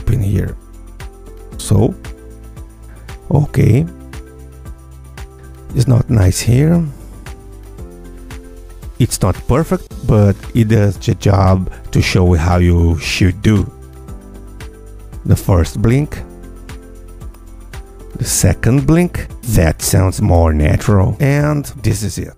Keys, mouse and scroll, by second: 0.1 F2, 1.0-12.0 drag, 2.8 Tab, 12.2-12.7 scroll down 2, 12.9 click, 13.8 click, 14.2 Tab, 14.9 space.